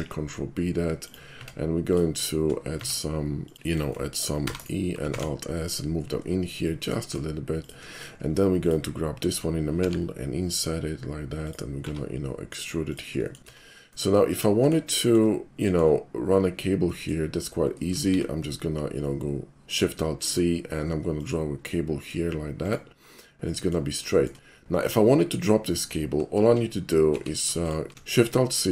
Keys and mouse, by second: 0.0 ctrl+b, 1.1 click, 1.4 Tab, 1.9 click, 2.8 Tab, 3.4 click, 3.7 shift+middle click, 3.9 shift+middle click, 4.5 e, 4.6 right click, 5.2 alt+s, 7.7 shift+click, 8.0 shift+middle click, 8.3 shift+middle click, 8.6 shift+click, 9.8 i, 11.5 click, 11.8 e, 12.9 click, 13.3 middle click, 13.5 Tab, 14.0-14.7 middle drag, 15.0 shift+middle click, 15.7 shift+middle click, 16.9 shift+middle click, 18.1 alt+shift+c, 20.2 click, 21.2 click, 21.7-22.1 middle drag, 22.7 click, 23.1-23.8 middle drag, 24.2 shift+middle click, 25.1 shift+middle click, 27.1 alt+shift+c.